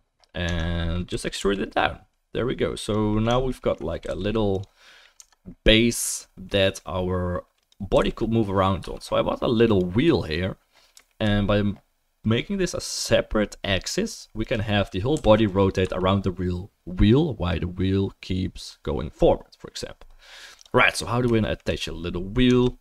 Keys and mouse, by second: 0.4 Tab, 0.4-3.4 middle drag, 1.1 a, 1.4 e, 3.4 alt+right click, 3.6 alt+middle click, 3.7-4.8 alt+right drag, 4.0 g, 4.8-9.0 middle drag, 5.2 Tab, 7.9 r, 9.0-9.7 right drag, 9.7 middle click, 9.8-14.4 right drag, 14.4 middle click, 14.5-20.6 right drag, 15.1 r, 20.6-22.8 drag, 22.5 Tab.